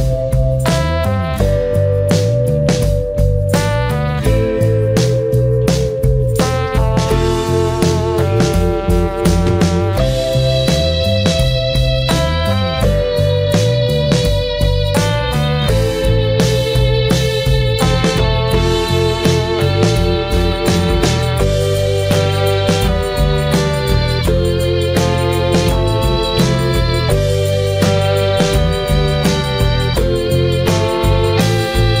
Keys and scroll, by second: 14.3 ctrl+0.